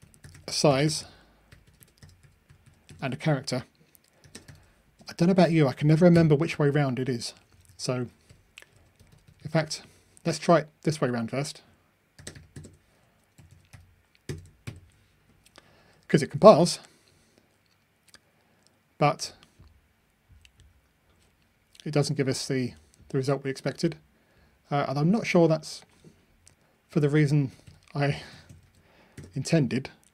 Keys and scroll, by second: 14.3 Delete, 14.8 super+F9, 16.6 ctrl+r, 26.9 super+x, 28.6 super+v.